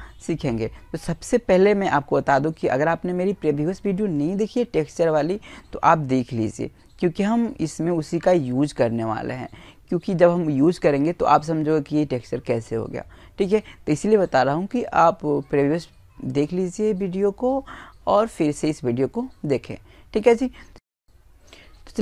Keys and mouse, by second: 0.1-4.1 middle drag, 5.6-6.8 drag, 5.6-10.6 middle drag, 6.8 right click.